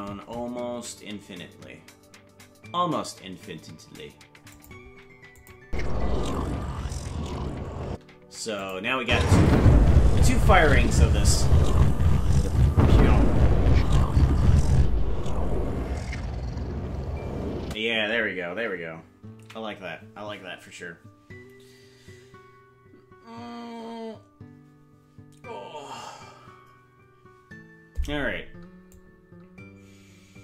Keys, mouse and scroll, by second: 5.4 click, 5.6 space, 7.9 space, 8.6 click, 9.0 space, 17.6 space, 21.5 ctrl+s, 29.0-30.4 drag.